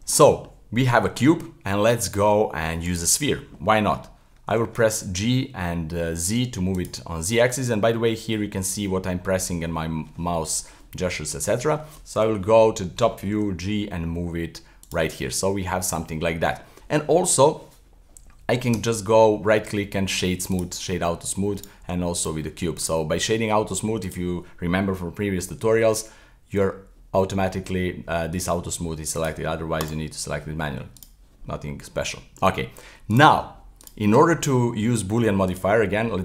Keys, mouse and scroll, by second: 0.1-1.1 middle drag, 3.0 shift+a, 4.5 g, 8.6 click, 8.8 scroll up 1, 9.0-9.6 scroll down 1, 11.0-12.2 middle drag, 12.2 KP_7, 12.7-13.3 scroll up 2, 13.3 g, 15.1-16.0 middle drag, 16.0-16.4 scroll down 1, 16.4-17.2 middle drag, 17.2-18.7 scroll up 1, 18.7 Delete, 18.7 w, 21.6 right click, 22.2 w, 22.8 right click, 24.0 click, 25.8-26.4 scroll down 1, 29.2 click, 29.8 click, 31.0 right click, 31.4-33.1 middle drag, 33.1 right click, 33.8-35.4 right drag, 35.4 click.